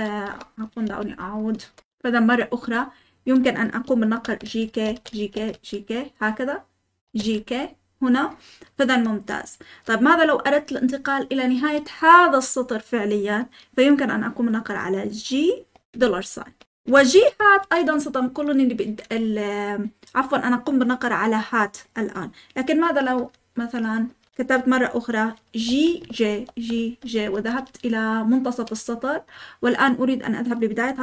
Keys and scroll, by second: 0.0-2.8 typing, 1.5 Escape, 4.2-7.2 typing, 15.5-16.4 typing, 23.1-24.0 typing, 25.6-28.4 typing.